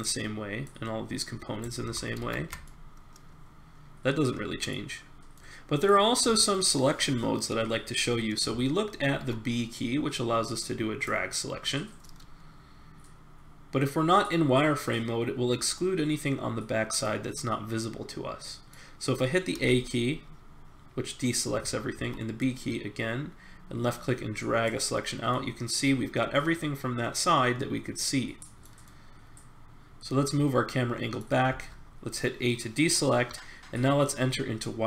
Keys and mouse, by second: 1.8 ctrl+z, 2.2 ctrl+z, 6.1-7.4 middle drag, 9.1 b, 10.6 click, 12.1-14.1 middle drag, 17.0 middle click, 17.5 click, 18.5 middle click, 19.5 a, 22.0 b, 28.8-30.9 middle drag, 31.5 a.